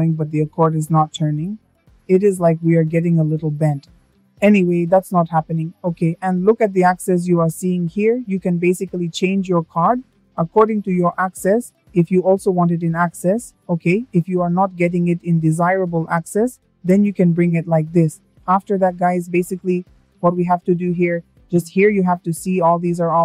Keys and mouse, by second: 7.2 click, 8.0 click, 8.5 click, 9.7 click.